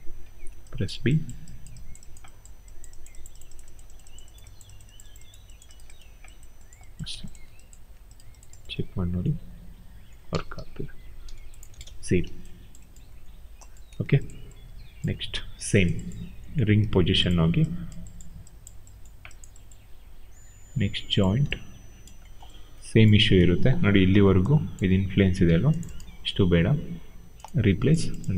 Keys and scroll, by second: 0.4 b, 7.0 q, 8.6 e, 10.3 ctrl+a, 11.5 0, 24.1 b.